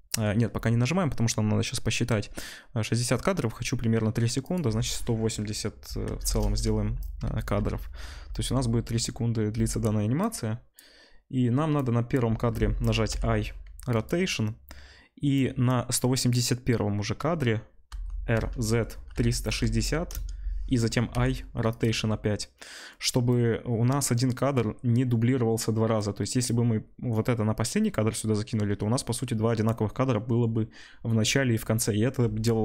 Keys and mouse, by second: 4.5-7.4 drag, 7.4 ctrl+s, 9.0 space, 13.0 i, 17.8 r, 21.1 i, 24.1-32.6 drag.